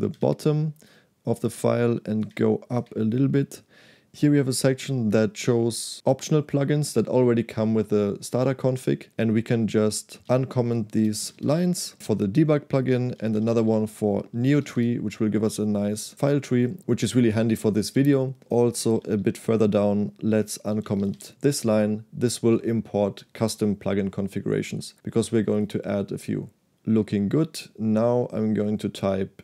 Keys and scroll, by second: 0.2 shift+g, 2.3 ctrl+u, 2.8 u, 10.3-11.9 typing, 13.3-15.5 typing, 18.5-19.1 typing, 20.5-21.6 typing.